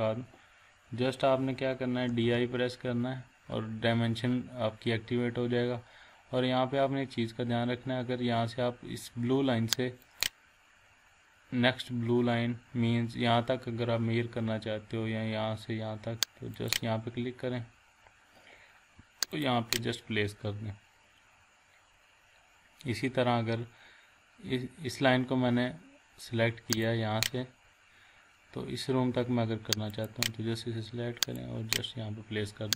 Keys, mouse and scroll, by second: 1.9-2.7 typing, 6.2-6.8 scroll up 1, 7.7 scroll down 1, 10.0 click, 11.8 scroll down 1, 12.4 scroll up 1, 16.6 click, 17.0-17.4 scroll down 1, 19.3 click, 19.9 scroll down 1, 20.4-21.1 scroll up 1, 22.1 scroll down 1, 22.6 scroll up 1, 27.3 scroll down 1, 27.9 scroll up 1, 29.9 click, 31.6 scroll down 1.